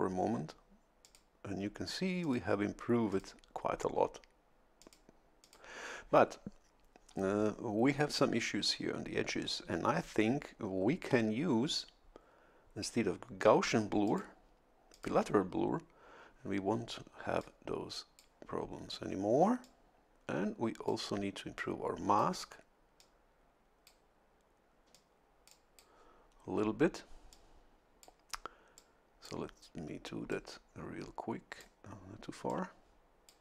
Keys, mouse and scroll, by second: 1.0 click, 2.2 click, 3.1 click, 4.8 click, 5.4 click, 14.1 click, 14.9 click, 17.4-18.4 drag, 19.6-21.1 drag, 21.6 click, 23.0-24.1 drag, 24.9-26.1 drag, 27.3 click, 28.8 click, 30.3-31.8 drag, 32.5-33.4 drag.